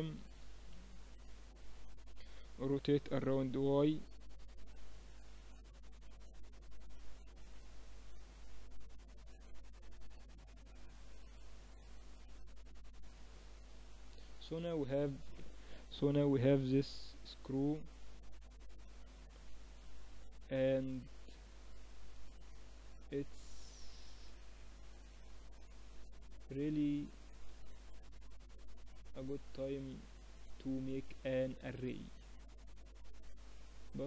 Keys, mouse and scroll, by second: 1.4-3.2 drag, 2.8 r, 5.1 z, 6.2 shift+b, 7.7-13.4 drag, 13.4-14.5 middle drag, 13.4 KP_3, 16.6 middle click, 17.1-19.0 drag, 18.9 z, 19.8-26.2 middle drag, 26.2-28.3 right drag, 28.3-29.9 middle drag, 29.9-31.7 drag, 31.7 middle click, 31.9-33.8 drag.